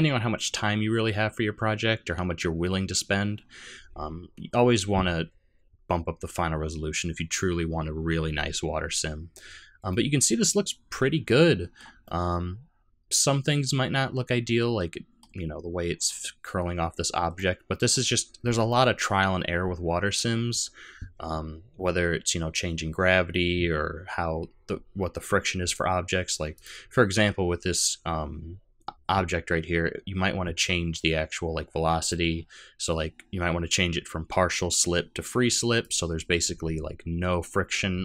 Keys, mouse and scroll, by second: 7.3-7.8 scroll down 1, 7.8-8.3 scroll up 1, 9.9 middle click, 12.1 middle click, 17.3 middle click, 26.6 click, 32.0 click.